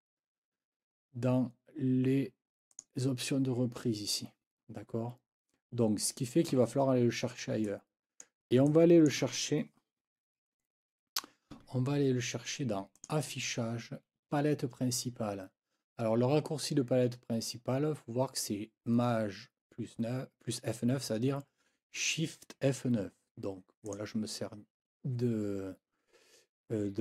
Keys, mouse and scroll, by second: 2.7 click, 6.5 F9, 7.6 click, 8.6 click, 13.0 click, 23.8 click.